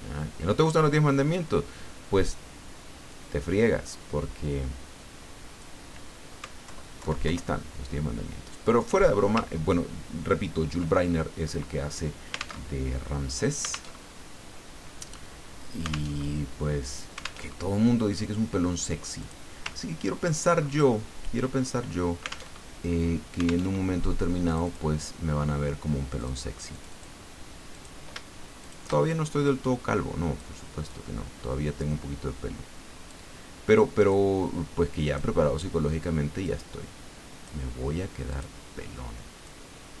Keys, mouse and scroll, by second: 1.0 click, 3.1-5.8 drag, 6.7 alt+Left, 9.9-10.3 ctrl+scroll down 2, 10.9 ctrl+click, 12.6 alt+Tab, 13.9 alt+Tab, 16.1 alt+Tab, 17.4 alt+Tab, 19.0 click, 19.7 ctrl+middle click, 20.6-21.4 ctrl+scroll up 2, 22.5 alt+Tab, 23.6 alt+Tab, 24.5 click, 26.2 click, 26.7 click, 27.7 click, 28.6 shift+click, 29.1-30.8 shift+drag, 30.9-33.3 drag, 34.1-35.4 drag, 36.4-37.8 drag, 38.3 click, 39.4-40.0 drag.